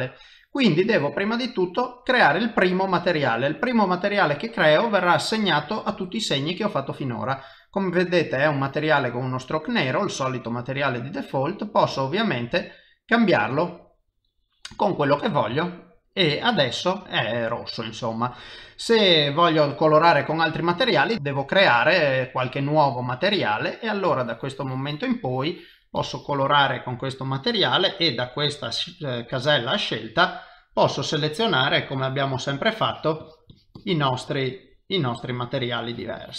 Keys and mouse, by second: 1.3 click, 4.0 middle click, 5.4 middle click, 9.5 click, 14.6 middle click, 15.8 ctrl+middle click, 16.4 middle click, 21.1 click, 21.7 click, 22.5 click, 24.1 click, 25.3 click, 26.0 click, 26.7 middle click, 27.9 click, 29.4 click, 30.9 click, 31.9 click, 32.9 click, 33.2 click, 33.5 click, 33.7 click, 34.5 click, 35.6 click, 35.9 click, 36.2 click.